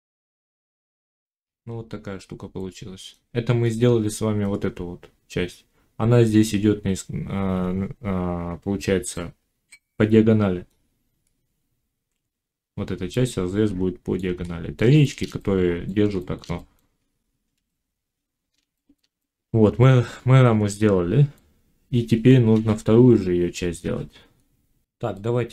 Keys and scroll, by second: 0.2 z, 0.5 Tab, 22.4 1, 23.7 5.